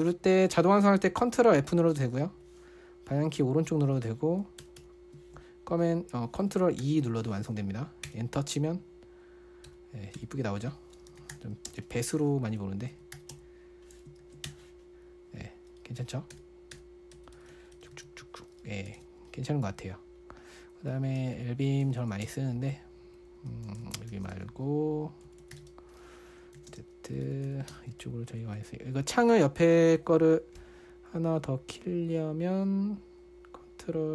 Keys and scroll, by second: 0.0-0.4 typing, 1.8 ctrl+f, 2.4-5.2 typing, 7.2 ctrl+e, 8.5 Return, 10.1 Return, 10.6 Return, 11.3-14.2 typing, 14.6 ctrl+f, 14.9 Return, 16.7 Return, 17.1 Return, 17.6-19.8 typing, 17.8 Return, 17.9 Return, 21.1-22.7 typing, 24.0-28.4 typing, 26.0 Return.